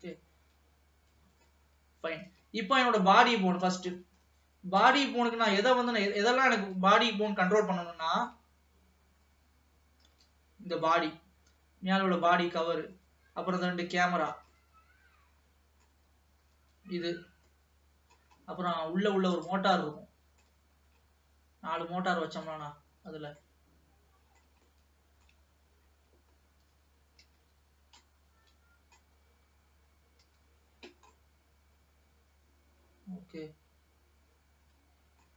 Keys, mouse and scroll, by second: 0.3-1.8 middle drag, 1.8-2.5 scroll up 1, 2.5 ctrl+s, 3.2-5.0 scroll up 20, 5.0 click, 5.9 middle click, 6.9 ctrl+s, 7.3-7.8 scroll up 1, 7.8-10.3 shift+middle drag, 10.3 l, 11.1-13.1 middle drag, 13.1 l, 14.1 l, 14.7-16.7 middle drag, 16.7 l, 17.7 middle click, 18.5-19.6 scroll up 3, 19.6 click, 20.0 middle click, 20.9-22.0 scroll up 1, 22.0 middle click, 22.8-23.6 scroll down 5, 23.6-25.8 middle drag, 25.8-27.3 scroll up 3, 27.3 l, 28.2-30.4 middle drag, 30.4 l, 31.3-34.7 middle drag.